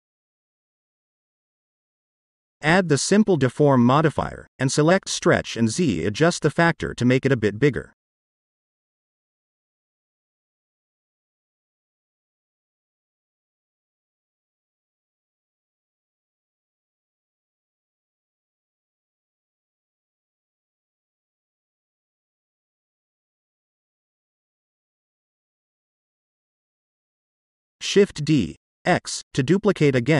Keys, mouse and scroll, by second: 0.2 click, 0.7-5.1 drag, 5.7-6.7 middle drag, 8.2 click, 10.0 click, 11.1-13.7 drag, 14.9-18.5 middle drag, 20.3 click, 21.7 click, 22.1 click, 23.3-24.8 middle drag, 25.6-26.3 drag, 27.6 shift+d, 27.9 x, 29.0 click.